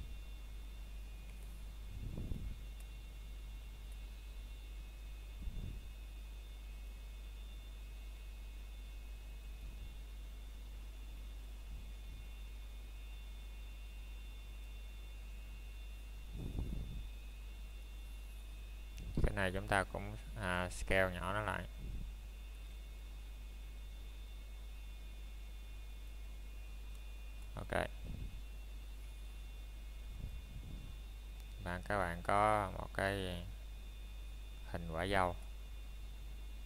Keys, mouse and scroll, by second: 3.7 click, 6.5 b, 8.0 click, 10.0 middle click, 10.5 scroll down 1, 11.0 middle click, 11.5 scroll up 1, 12.6 click, 13.1 middle click, 13.5-14.0 scroll up 1, 14.3 middle click, 14.6 scroll down 1, 14.9 shift+middle click, 17.4 alt+s, 21.0 click, 21.4 scroll down 1, 21.9 middle click, 22.3 shift+middle click, 23.3-23.8 scroll up 1, 24.1 Tab, 25.4 click, 25.9-26.4 scroll down 1, 26.4 middle click, 30.6 shift+middle click, 31.0 scroll up 1, 31.7 middle click, 32.1 scroll down 1, 32.4 middle click, 32.7-33.2 scroll down 1, 33.2 middle click, 33.7 scroll up 1, 35.0 middle click, 35.9-36.6 scroll up 1.